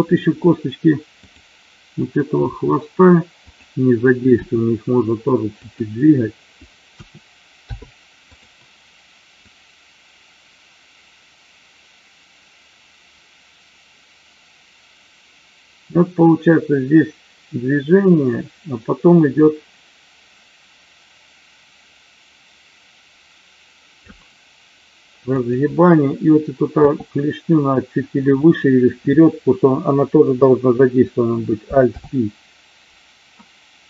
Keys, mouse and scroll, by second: 1.3 click, 2.3 r, 3.4 click, 4.3 g, 5.5 click, 6.8 a, 7.5 i, 9.4-24.0 drag, 25.2 click, 26.8 g, 28.4 click, 31.8 alt+p.